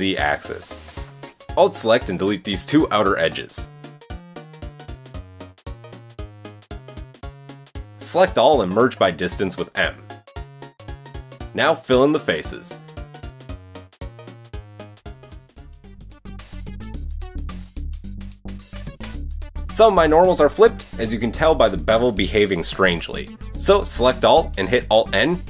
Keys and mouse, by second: 1.3 alt+middle click, 1.3 alt+right click, 2.6 x, 6.0 alt+click, 6.5-8.0 drag, 6.5 x, 8.0 a, 9.4 m, 11.4-11.7 shift+drag, 11.4 shift+middle drag, 11.4 shift+right drag, 12.2-13.4 drag, 12.8 f, 13.4 shift+click, 13.9 click, 13.9 f, 14.1-16.9 shift+drag, 15.0 f, 15.2 f, 16.9 middle click, 16.9 shift+click, 17.3 shift+middle click, 17.5 shift+click, 17.6 f, 18.0 shift+middle click, 18.1-25.4 shift+drag, 18.7 f, 18.9 f, 19.1 f, 19.5 Tab, 22.7 Tab, 24.9 a.